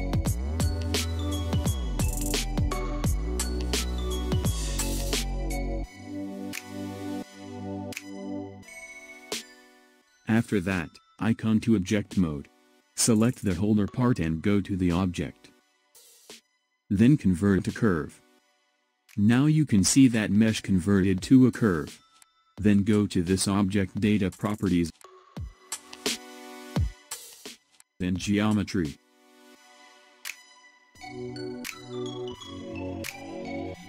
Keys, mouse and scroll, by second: 0.4-2.0 middle drag, 2.0 shift+click, 2.8-4.2 middle drag, 4.2 s, 8.6-11.6 middle drag, 15.0-18.1 drag, 20.1-23.1 middle drag, 29.1-30.4 drag, 30.4-32.8 scroll down 1.